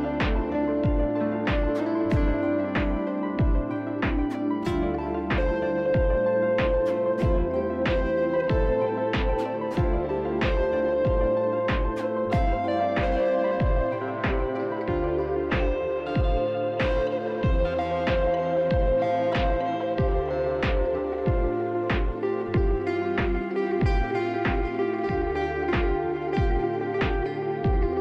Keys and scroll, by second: 1.4 e, 2.3 e, 3.7 q, 5.2 e, 8.6 q, 10.0 e, 10.7 q, 11.4 f, 22.7-24.8 typing.